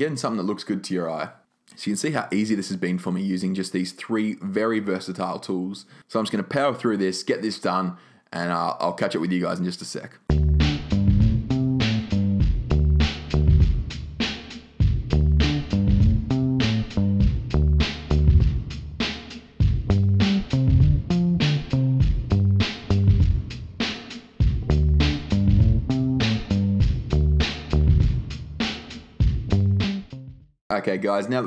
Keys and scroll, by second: 12.5 2, 13.9 0, 16.4 0, 25.3 super+z, 25.6 super+z, 29.7 super+z, 29.9 super+z.